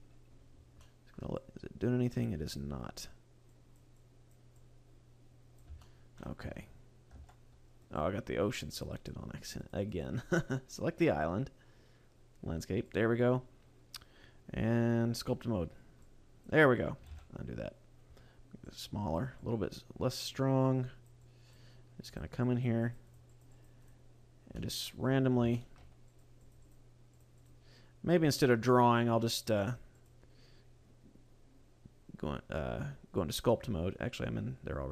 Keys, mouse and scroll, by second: 0.2 scroll up 1, 0.4-0.8 scroll down 5, 0.8 middle click, 1.4 click, 2.6 scroll up 1, 3.5 click, 4.0 click, 4.6 click, 5.8 shift+middle click, 6.6 Tab, 7.4 Tab, 7.9 right click, 8.7 click, 9.0 click, 10.1 click, 10.5 right click, 11.7 scroll down 3, 12.9 click, 15.7 scroll up 2, 16.1 click, 17.2 ctrl+z, 18.6 click, 19.4 click, 20.6 click, 21.2 click, 22.0 click, 22.5 click, 22.8 click, 23.2 click, 23.4 click, 23.6 click, 23.8 click, 24.2-24.6 scroll down 1, 24.6 middle click, 25.6 shift+middle click, 26.2 click, 26.6 click, 26.7 click, 27.2 click, 27.4 click, 28.2 scroll down 2, 28.4 middle click, 30.0 click.